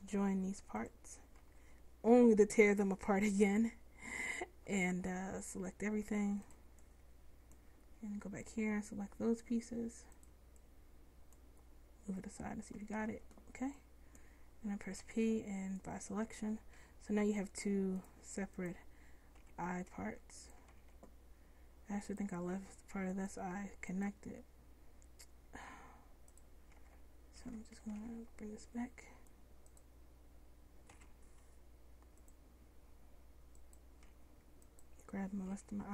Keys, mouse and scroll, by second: 0.9 middle click, 1.5 Tab, 3.5 c, 8.0 c, 13.1 ctrl+z, 15.0 p, 17.0 Tab, 19.4 g, 20.8 ctrl+z, 22.6 g, 26.9 ctrl+z, 27.6 ctrl+z, 28.0 ctrl+z, 31.0 m, 34.1 Tab, 35.6 Tab.